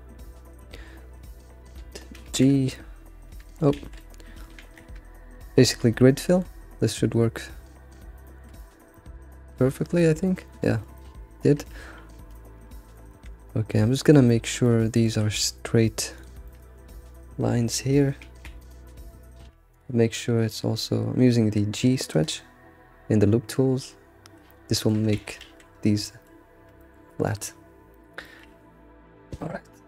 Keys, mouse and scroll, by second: 0.2-2.2 middle drag, 2.2 alt+shift+g, 2.3 alt+shift+d, 2.5 scroll down 2, 2.7-3.8 middle drag, 3.8 ctrl+z, 4.6 ctrl+shift+g, 5.5-7.7 shift+middle drag, 7.7 scroll down 2, 8.2 alt+middle click, 8.6-10.4 middle drag, 8.6 ctrl+shift+c, 10.5 middle click, 11.4 middle click, 12.3 ctrl+shift+f, 12.7 middle click, 13.1 ctrl+shift+f, 13.1 Tab, 13.2 Tab, 13.7 click, 13.9-15.3 middle drag, 15.3 scroll up 2, 16.1 ctrl+click, 16.5-18.2 ctrl+middle drag, 18.2 alt+shift+g, 18.8 shift+middle click, 19.7-22.1 drag, 20.3 alt+shift+h, 22.2 alt+shift+g, 24.3-24.7 right drag, 24.7-25.2 shift+middle drag, 25.2 ctrl+z, 26.0-26.9 shift+middle drag, 27.3 middle drag, 27.6-27.9 scroll up 3, 27.9-29.8 middle drag.